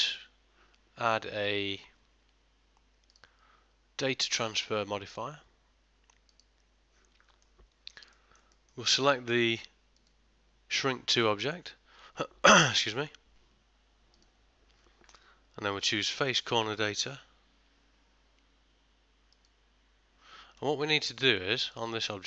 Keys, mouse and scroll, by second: 3.2 click, 7.5 ctrl+middle click, 8.2 shift+middle click, 8.6 middle click, 10.0 click, 19.5 click, 20.7 middle click, 21.7 click.